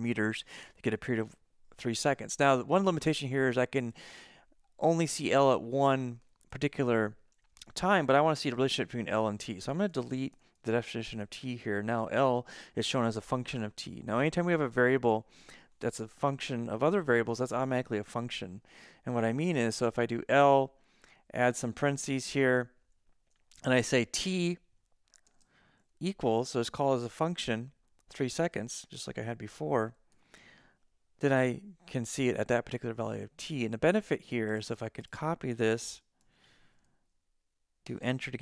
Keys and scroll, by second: 7.8 End, 8.7-10.2 typing, 11.2 BackSpace, 19.8 Left, 21.4-22.3 typing, 22.6 Left, 25.3 shift+t, 25.9 =, 28.2-30.2 typing, 36.2 super+c, 38.0 Return.